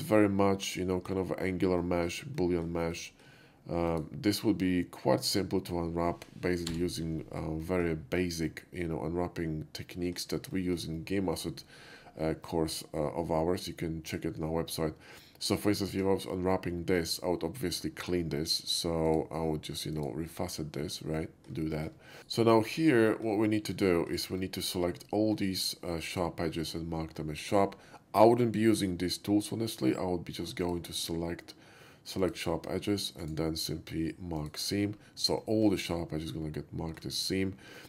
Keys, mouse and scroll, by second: 0.8 shift+middle click, 1.9 shift+middle click, 2.4 shift+middle click, 3.0 shift+middle drag, 3.9 shift+click, 5.3 shift+click, 6.8-7.2 scroll up 1, 7.7 shift+middle drag, 8.5-10.2 shift+middle drag, 10.6 shift+middle drag, 12.5-15.6 middle drag, 16.0 Tab, 18.0 click, 19.1 click, 20.0 click, 21.0 middle click, 21.8 shift+middle click, 22.2 ctrl+z, 22.2 click, 22.7 middle click, 23.2 shift+middle click, 23.8 shift+middle click, 24.5 shift+middle click, 25.4-26.8 shift+middle drag, 27.2 shift+middle click, 30.7 click, 32.3 click, 33.3 right click, 34.4 click, 35.5 shift+middle click, 35.8 shift+click, 36.2 shift+middle click, 37.8 click.